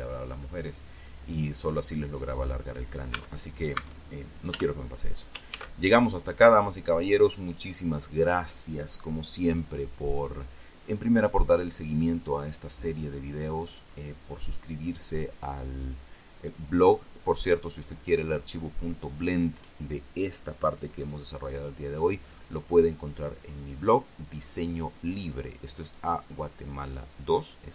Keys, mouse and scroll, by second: 0.3-1.7 scroll up 1, 1.7-3.6 scroll up 1, 3.6 scroll up 1, 3.7 Tab, 4.4 Tab, 5.1 z, 5.6-6.6 scroll down 2, 6.1 ctrl+s, 7.9 click, 8.2-13.8 middle drag.